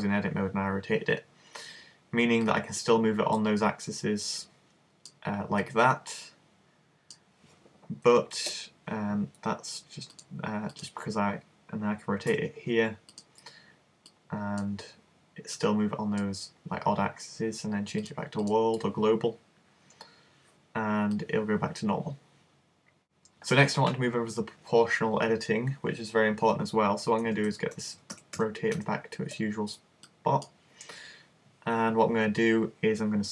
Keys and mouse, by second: 2.5 click, 5.7 click, 8.4 super+z, 11.3 click, 12.4 r, 13.2-17.6 drag, 18.0 click, 21.2 click, 27.2 super+z, 27.5 super+z, 27.8 super+z, 28.0 super+z, 28.2 super+z, 28.4 super+z, 28.8 super+z, 30.1 click.